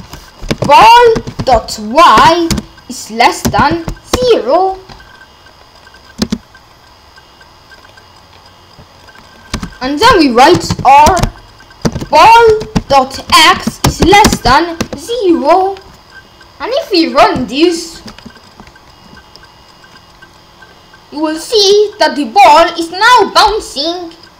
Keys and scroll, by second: 0.0-2.5 typing, 3.6 shift+,, 4.2 0, 6.2 space, 9.5 space, 10.6-14.8 typing.